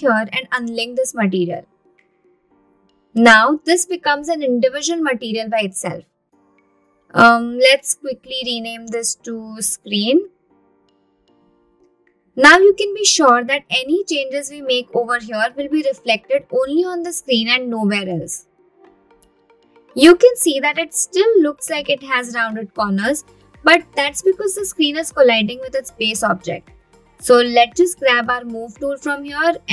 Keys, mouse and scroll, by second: 2.8 click, 8.3-11.8 drag, 10.7 e, 14.7-16.1 scroll down 7, 16.1 click, 18.6 click, 23.2-24.1 middle drag, 24.3-24.7 scroll up 2, 27.5 t, 28.6 click.